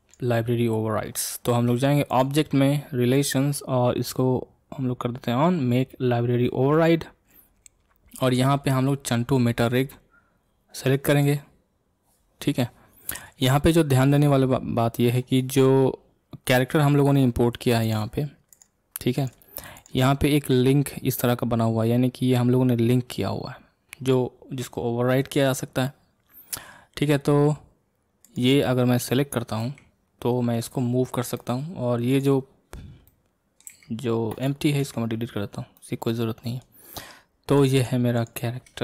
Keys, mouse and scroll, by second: 0.6 scroll up 2, 1.2 shift+middle click, 2.1-13.9 drag, 13.9-16.9 middle drag, 17.8 click, 18.5 click, 19.2 click, 19.8 click, 28.2 click, 29.6 g, 32.1 click, 33.1-33.7 middle drag, 33.7 g, 34.8 x, 35.8-37.6 middle drag, 37.6 click, 37.8-38.8 drag.